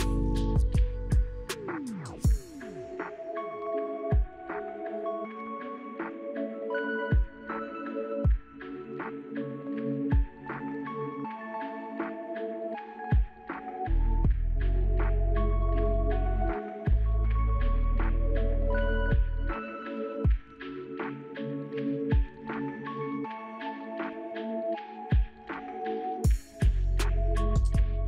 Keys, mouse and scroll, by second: 6.3 ctrl+c, 6.5 ctrl+c, 6.7 ctrl+c, 9.7 ctrl+v, 10.1 Return, 20.9 shift+click, 25.4 right click, 26.9 shift+right click.